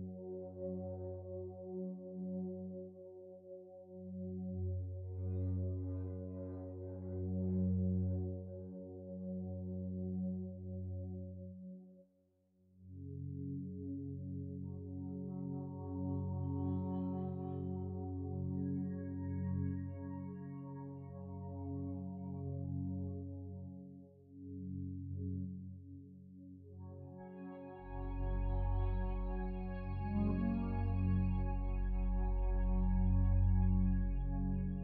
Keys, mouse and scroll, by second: 1.5 3, 1.7 Return, 8.9 ctrl+7.